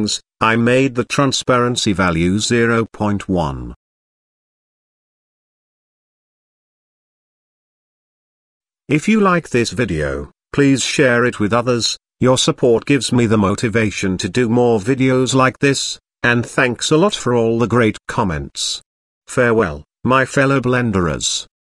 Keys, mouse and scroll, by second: 0.8-1.2 scroll up 2, 1.2 shift+middle drag, 1.6 scroll up 1, 4.0 click, 4.9-6.2 drag, 7.9 KP_0, 9.3 drag, 10.1 click.